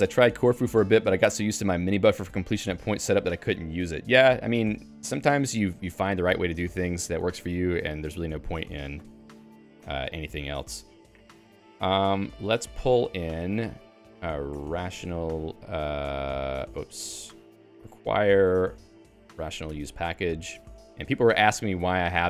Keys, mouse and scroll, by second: 8.9 q, 9.8 Escape, 10.1-15.7 typing, 17.1 Home, 17.4 Right, 17.5-22.0 typing.